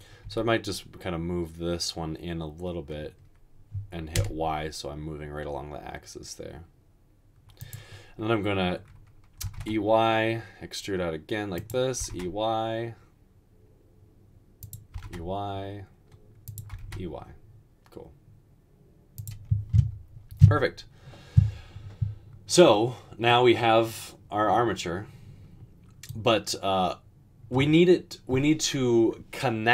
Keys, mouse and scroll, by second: 0.3 g, 4.3 y, 9.5 typing, 12.0 typing, 15.0 typing, 16.7 typing.